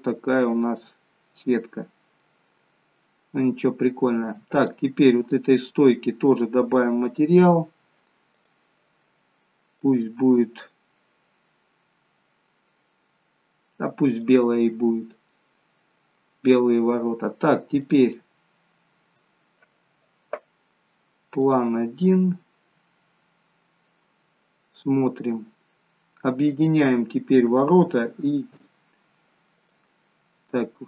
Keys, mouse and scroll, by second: 2.0 scroll down 3, 2.3 middle click, 3.8-4.6 scroll up 1, 4.6 click, 7.1 click, 14.1 click, 15.0 scroll down 2, 15.3 middle click, 18.3 click, 21.7 click, 24.3-24.8 scroll down 2, 24.8 middle click, 25.8-26.4 scroll up 3, 26.4 click, 27.6-28.6 Tab, 29.6 click, 30.3 middle click.